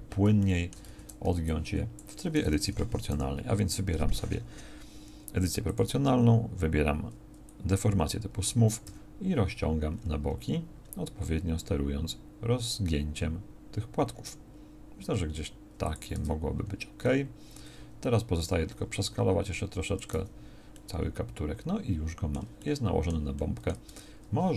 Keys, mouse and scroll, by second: 0.9 z, 1.3 b, 3.1 o, 16.2 Tab, 18.4 s, 20.1 z, 23.4 middle click, 23.9 Tab.